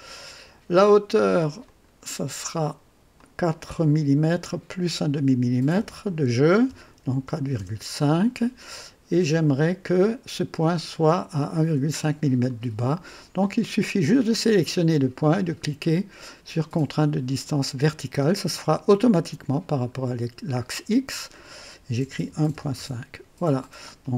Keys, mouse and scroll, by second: 1.5 click, 3.1 click, 5.7 KP_4, 5.7 KP_4, 6.6 KP_Decimal, 6.9 KP_5, 7.5 KP_Enter, 9.7 click, 17.4 click, 19.6-20.0 scroll up 2, 21.9-22.9 typing, 22.7 KP_Enter.